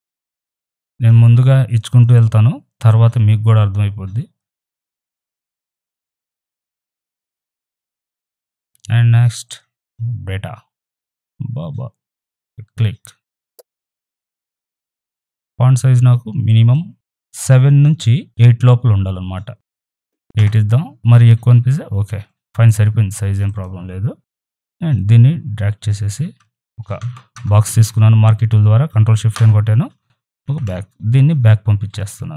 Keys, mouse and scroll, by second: 0.4 click, 1.6 right click, 1.9-4.7 drag, 4.7 ctrl+t, 5.0-6.8 alt+drag, 6.8 ctrl+t, 7.1-8.7 alt+drag, 9.4 click, 11.2-13.4 drag, 13.4 ctrl+t, 13.7-14.9 alt+drag, 14.9 alt+click, 20.3 Return, 23.4 click, 24.5-27.0 drag, 27.0 ctrl+shift+n, 27.3 ctrl+Return, 30.4 ctrl+d, 31.3 ctrl+[.